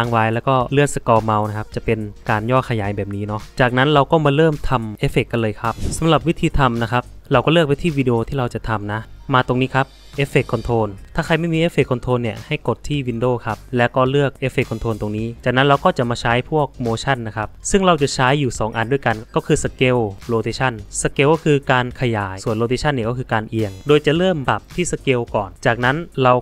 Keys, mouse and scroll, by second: 0.4 alt+middle click, 0.8 alt+middle click, 0.9 alt+scroll, 1.2 alt+middle click, 1.6 alt+middle click, 1.6 alt+scroll, 2.0 alt+middle click, 8.4 click, 25.7 click.